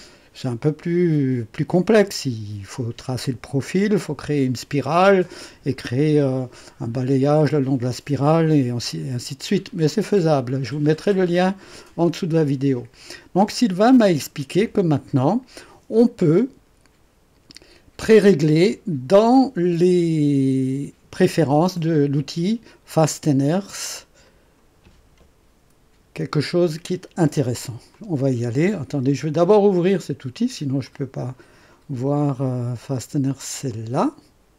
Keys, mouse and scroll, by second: 24.2 click, 27.9 click, 29.5 click, 30.8 click, 33.6 click.